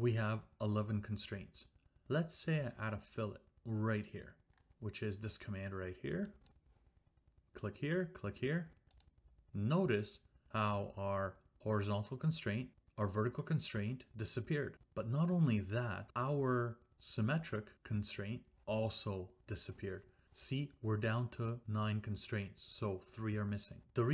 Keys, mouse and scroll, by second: 6.5 click, 7.4 click, 9.0 click.